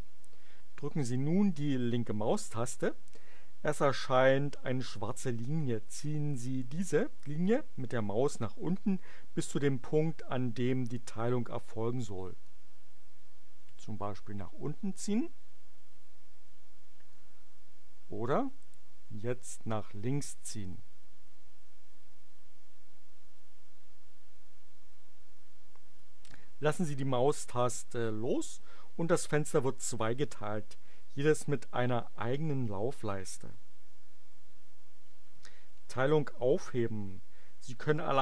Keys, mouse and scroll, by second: 12.4-17.3 drag, 19.4-26.1 drag.